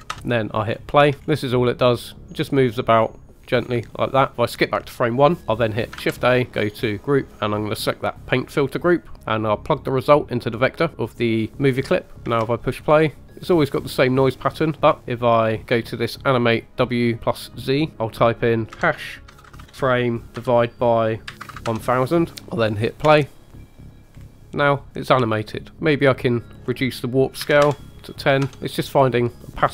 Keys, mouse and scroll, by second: 0.7-1.5 scroll up 4, 1.0 space, 1.7 click, 2.5 scroll down 1, 3.1 scroll down 1, 3.8-4.3 scroll up 1, 4.3 click, 4.3 space, 6.0 shift+a, 9.2 click, 9.8 click, 12.1 middle click, 12.1 scroll up 3, 12.3 space, 13.1-13.4 scroll up 2, 15.0 click, 17.7-21.8 drag, 21.5 KP_0, 21.6 KP_0, 23.1 space, 24.2 scroll down 2, 26.6 click, 27.9 click, 28.6-29.7 scroll down 1.